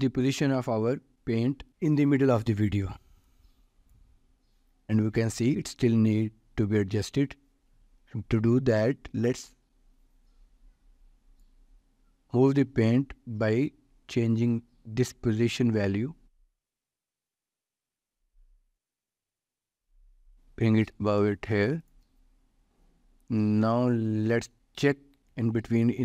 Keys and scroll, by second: 1.7 ctrl+s.